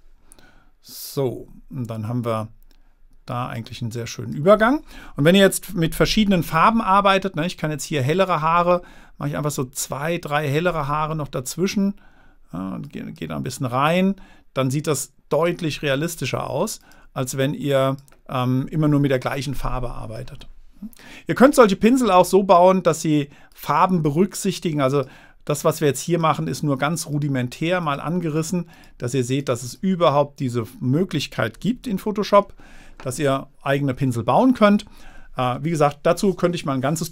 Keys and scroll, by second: 32.3 super+-.